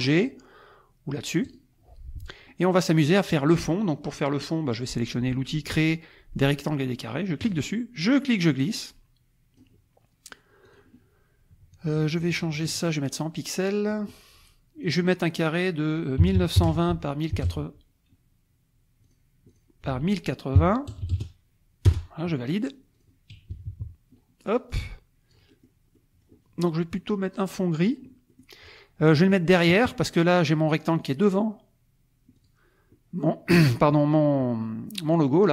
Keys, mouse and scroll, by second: 1.4 click, 7.4 click, 10.6 click, 12.7 click, 13.9 click, 14.8 click, 16.2-17.4 typing, 16.9 Tab, 19.0 click, 19.5 click, 19.9 ctrl+a, 20.6 KP_1, 20.9 KP_0, 21.0 KP_8, 21.1 KP_0, 21.9 Return, 22.9 click, 23.5 KP_Subtract, 24.5-25.8 drag, 25.9-28.1 drag, 28.1 middle click, 28.4 click, 28.9-30.4 middle drag, 32.4 click, 33.9 click, 34.2-35.4 middle drag, 35.4 click.